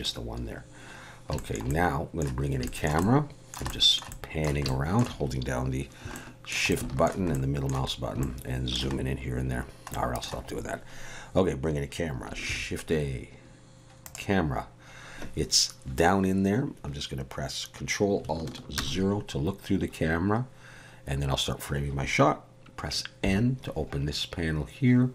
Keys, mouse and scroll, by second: 0.0 click, 0.6-1.3 scroll down 4, 1.4 shift+middle click, 1.7 middle click, 2.5 scroll up 1, 2.7 shift+middle click, 3.0 middle click, 3.7 shift+middle click, 4.1 middle click, 4.6 shift+middle click, 6.1 shift+middle click, 6.7 middle click, 7.3 shift+middle click, 7.9 scroll up 1, 8.2 shift+middle click, 9.0-9.6 scroll up 1, 9.6-9.9 scroll down 1, 9.9 middle click, 12.5 shift+a, 18.8 ctrl+alt+KP_0, 23.2 n.